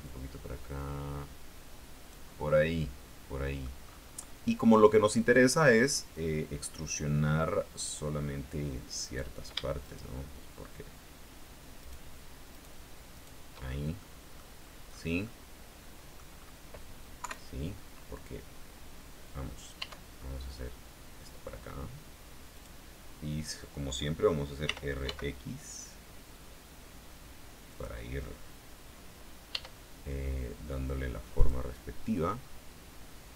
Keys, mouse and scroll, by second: 0.2-2.4 drag, 2.7-4.0 middle drag, 4.0-4.5 scroll up 2, 9.2 right click, 10.0 shift+right click, 12.0 shift+right click, 12.7 shift+right click, 13.3 shift+right click, 13.8 shift+scroll down 2, 14.2 middle click, 15.0 scroll down 2, 15.4-16.5 middle drag, 16.5-17.4 scroll up 2, 17.4 KP_3, 20.0 e, 22.7 click, 24.8 r, 25.2 x, 27.8 click, 29.7 e, 31.5 click.